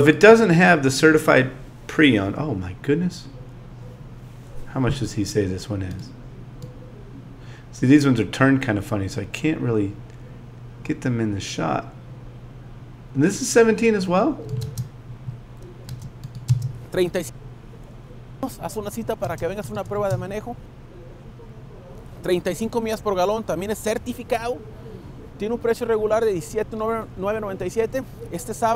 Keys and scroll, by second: 14.6 space, 15.9 space.